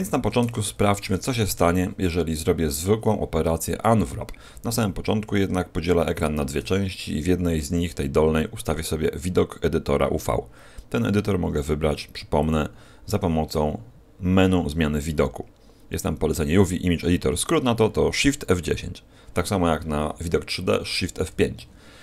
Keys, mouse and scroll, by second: 0.3 Tab, 1.4 u, 5.4 shift+F10, 7.3-8.0 scroll up 2, 9.9-12.3 scroll up 1, 12.3 click.